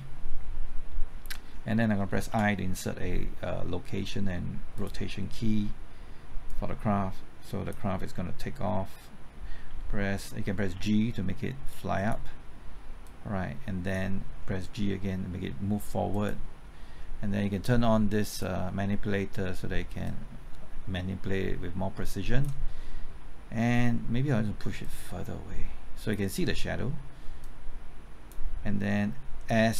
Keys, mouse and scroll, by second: 2.2 i, 4.7 click, 9.7 w, 10.7 g, 11.9 click, 15.0 g, 16.1-29.7 drag.